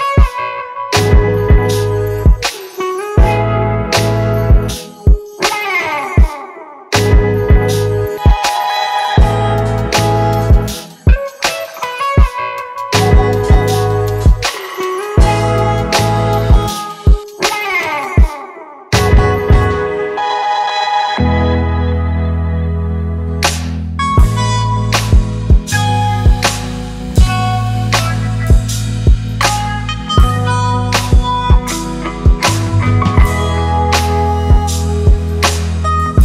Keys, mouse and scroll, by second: 1.1 ctrl+-, 1.6 ctrl+-, 3.6-4.5 alt+scroll up 1, 6.6 right click, 15.2-16.9 typing, 24.8-25.2 typing, 26.6 typing, 29.6-30.6 typing, 32.1-33.2 typing.